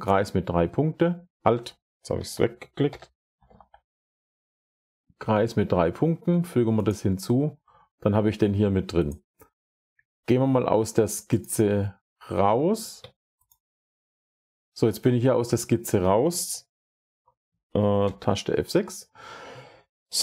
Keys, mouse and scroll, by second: 1.0 click, 2.0-3.9 typing, 2.7 click, 6.8 click, 9.0 click, 11.3 click, 12.4 Escape, 13.4 click, 14.7-15.5 scroll, 16.1-17.1 scroll, 17.1-17.9 scroll, 17.9 F6, 18.3 scroll, 19.1 scroll, 20.0 scroll.